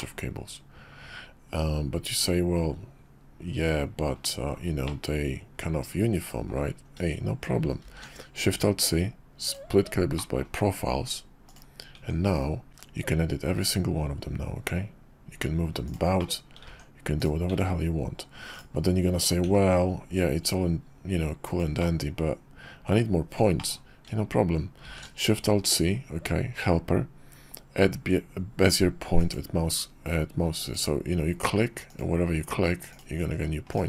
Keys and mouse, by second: 7.8 alt+shift+c, 12.0 Tab, 12.7 g, 16.1 click, 16.6 Tab, 17.2 click, 17.5 Tab, 18.5 click, 19.4 g, 21.8-22.9 middle drag, 23.6 middle click, 24.8 alt+shift+c.